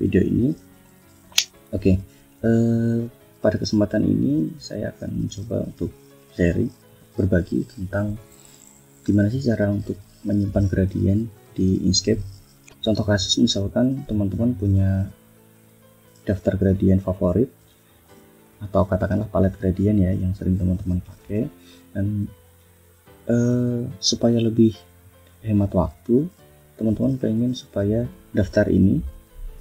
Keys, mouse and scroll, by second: 13.6 click, 14.6 click, 15.8 click, 16.5 click, 17.1 click, 17.5 click, 17.9 click, 18.3 click, 18.9 click, 19.8 click, 20.2 click, 20.6 click, 21.0 click, 21.6 click, 22.3 click, 22.9 click, 23.7 click, 24.2 click, 25.0 click, 25.7 click, 26.2 click, 27.2 click, 27.8 click.